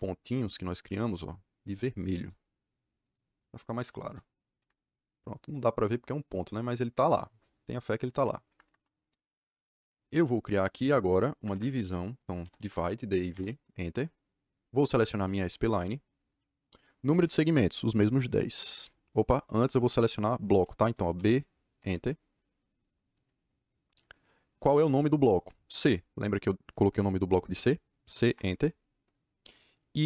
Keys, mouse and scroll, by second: 0.3 click, 2.1 click, 3.0 click, 4.0 click, 4.5 Escape, 7.6 click, 7.8 click, 8.4 Escape, 11.5 Escape, 12.1-13.0 typing, 13.2 Return, 15.2 click, 18.2 KP_1, 18.3 KP_0, 19.2 BackSpace, 21.1 b, 21.7 Return, 25.7 c, 28.3 Return.